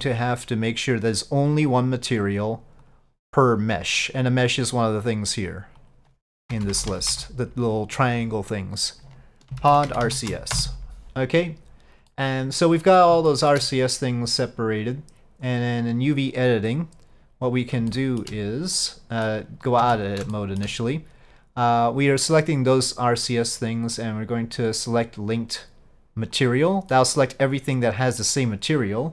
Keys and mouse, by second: 0.0 Tab, 0.7 click, 2.0-3.0 drag, 5.3-11.3 drag, 6.8 BackSpace, 12.2-13.1 middle drag, 13.4 shift+middle drag.